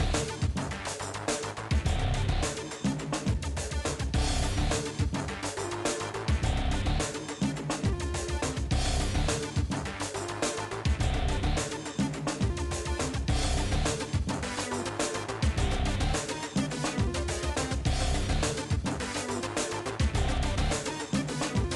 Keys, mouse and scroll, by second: 0.4 shift+middle click, 0.9 shift+click, 2.1 s, 3.4 shift+click, 4.2 g, 4.8 s, 5.2 s, 5.8 shift+click, 6.5 s, 7.5 middle click, 8.3 s, 9.1 shift+click, 9.8 s, 10.5-11.9 middle drag, 12.3 KP_1, 12.6 KP_3, 13.0 click, 13.6 s, 14.3 click, 15.0 s, 15.6 click, 16.1 s, 16.7 click, 16.9 s, 17.4-17.7 scroll up 2, 17.7 shift+middle click, 17.9 scroll down 2, 18.1 middle click, 18.8 scroll down 1, 18.9 middle click, 19.4 scroll down 1, 19.6 shift+middle click, 20.6 click, 20.8-21.7 middle drag.